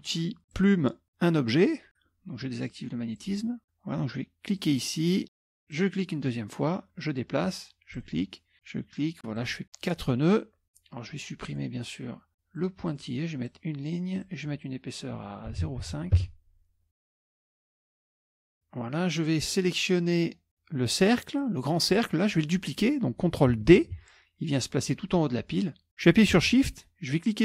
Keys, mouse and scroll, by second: 0.6 click, 3.2-4.3 drag, 4.6 click, 5.8 click, 6.9-7.7 scroll down 1, 7.7 scroll down 1, 8.0 click, 9.4 click, 9.7-10.4 scroll up 1, 11.5 click, 12.6 click, 13.5 click, 14.3 click, 15.6 KP_0, 15.8 KP_Decimal, 15.9 KP_5, 16.3 KP_Enter, 18.2 click, 19.3-19.9 scroll up 1, 19.9 scroll up 1, 20.5 click, 21.3 click, 24.0 ctrl+d.